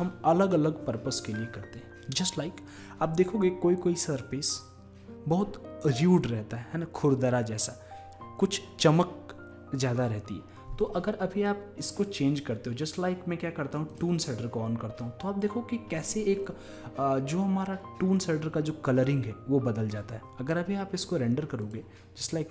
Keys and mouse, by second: 21.7-22.5 drag.